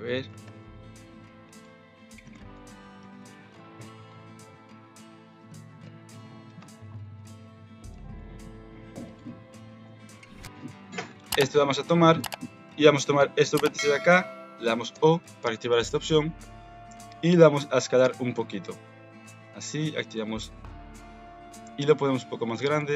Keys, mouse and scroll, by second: 0.4 alt+shift+s, 1.6 Tab, 2.3 alt+z, 2.5 middle click, 3.0 Tab, 3.1 middle click, 4.0 ctrl+KP_Subtract, 4.5 s, 6.5 Tab, 7.1 alt+z, 7.3 middle click, 7.9 alt+z, 8.2 middle click, 9.1 click, 9.8 KP_3, 10.1 KP_Decimal, 10.6 Tab, 11.1 alt+z, 12.0 middle click, 13.4 click, 14.9 o, 16.3 KP_3, 18.0 s, 22.7 alt+z.